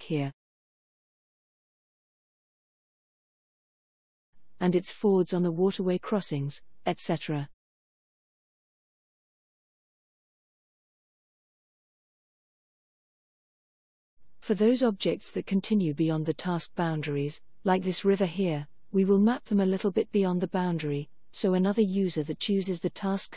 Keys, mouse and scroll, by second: 0.0 click, 3.0-3.4 scroll up 2, 5.2-6.4 middle drag, 6.4 click, 6.7 right click, 6.7 click, 6.9 right click, 7.1 click, 7.5-7.8 scroll up 2, 9.0 click, 12.3 click, 13.2-14.5 scroll down 1, 14.5-14.8 scroll down 1, 16.1 click, 17.6-18.4 scroll up 4, 19.7 middle click, 22.6 middle click, 22.8 click, 22.8 right click, 23.0 click, 23.0 right click, 23.2 click, 23.2 right click.